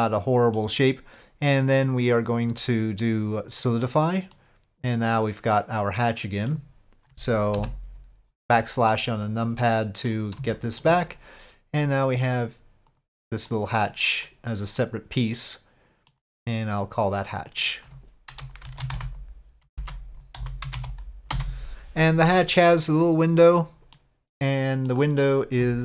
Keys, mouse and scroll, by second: 1.5 click, 2.3-3.7 drag, 4.3-6.5 middle drag, 8.6-8.9 drag, 9.7-10.1 drag, 10.5 shift+drag, 10.6 shift+middle drag, 12.3 click, 12.9 click, 13.4 middle click, 14.8-16.1 middle drag, 17.3-22.3 drag, 19.8 BackSpace, 23.6-23.9 middle drag, 24.9-25.2 middle drag, 25.5 click.